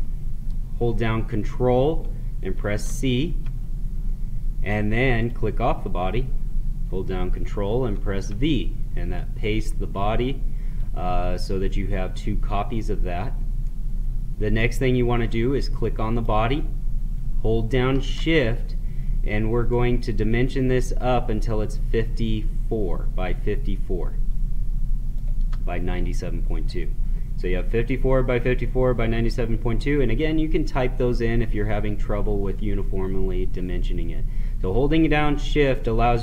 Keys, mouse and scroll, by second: 2.5 ctrl+c, 5.1 click, 7.8 ctrl+v, 9.1-11.4 drag, 11.4-16.0 middle drag, 16.1 click, 19.6-27.7 shift+drag, 35.4 shift+Num_Lock, 35.7-36.2 shift+drag.